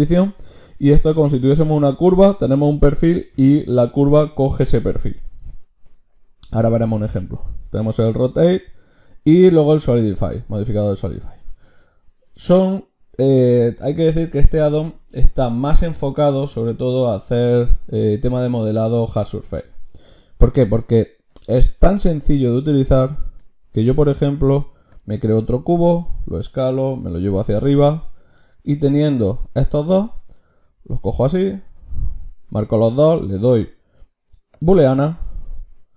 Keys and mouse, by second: 23.8-25.0 drag, 23.8 shift+a, 25.9 s, 26.9 g, 29.0-32.5 drag, 32.5 ctrl+shift+q.